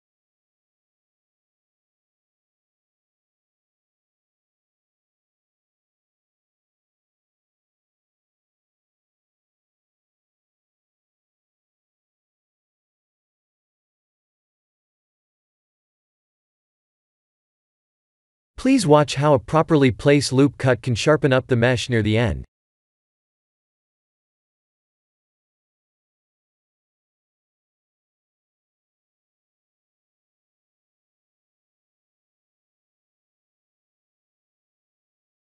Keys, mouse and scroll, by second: 0.3 ctrl+r, 4.3 Tab, 4.7 right click, 5.1 Tab, 6.5 middle click, 7.1 Tab, 7.4 middle click, 8.0 s, 10.6 middle click, 11.4 middle click, 11.7 middle click, 12.1 Tab, 12.5 middle click, 13.2 shift+z, 13.9 middle click, 14.7 shift+z, 17.3 ctrl+r, 19.1 ctrl+z, 19.5 ctrl+r, 23.2 KP_1, 23.9 shift+z, 25.1 ctrl+r, 27.9 Tab, 28.8 shift+z, 30.1 click, 30.5 middle click, 33.6 shift+z, 34.2 middle click, 34.4 middle click, 34.6 middle click, 35.2 shift+z.